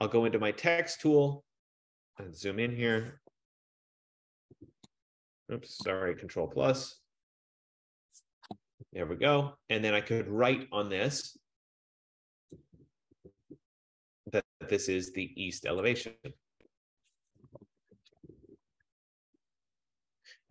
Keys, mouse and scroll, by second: 0.6 click, 3.4 alt+=, 6.4 ctrl+=, 7.2 ctrl+=, 8.1 ctrl+=, 16.8 click, 17.4-19.9 typing.